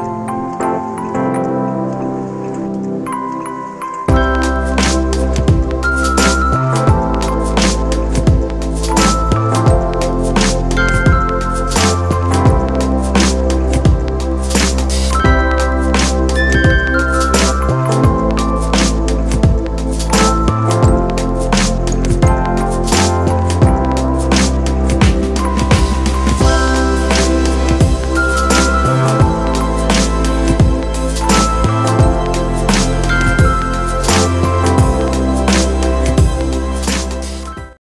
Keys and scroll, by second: 19.2-19.8 typing, 22.9 typing.